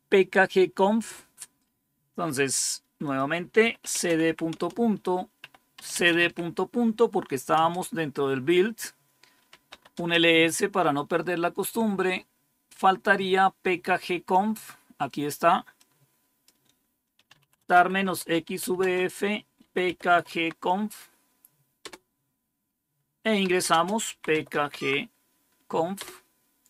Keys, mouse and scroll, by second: 3.0 click, 3.3-7.5 typing, 9.4-10.3 typing, 15.7 click, 16.9-20.5 typing, 23.3-24.6 typing, 25.9-26.6 typing.